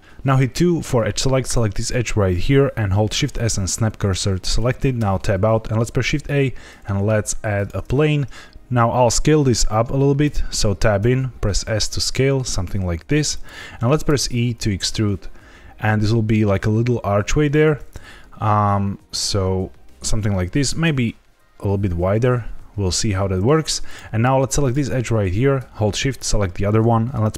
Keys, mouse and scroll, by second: 0.5 2, 1.4 click, 3.0 shift+s, 4.9 Tab, 6.0 shift+a, 10.2 Tab, 10.9 s, 13.3 click, 14.0 e, 17.5 click, 20.4 a, 20.6 s, 20.8 x, 23.8 click, 24.5 click, 26.0 shift+click.